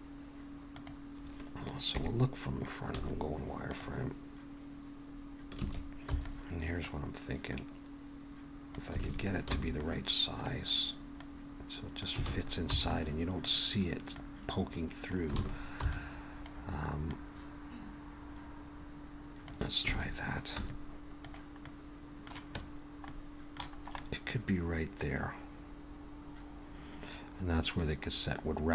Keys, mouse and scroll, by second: 1.9 KP_3, 2.9 z, 5.6 alt+a, 6.1 b, 7.5 click, 9.0 alt+a, 9.5 b, 11.2 click, 12.3 alt+a, 12.7 b, 14.1 click, 15.4 alt+a, 15.8 b, 17.1 click, 19.9 alt+a, 20.5 z, 21.6 middle click, 23.1 middle click, 23.8-24.3 scroll up 2, 24.0 middle click.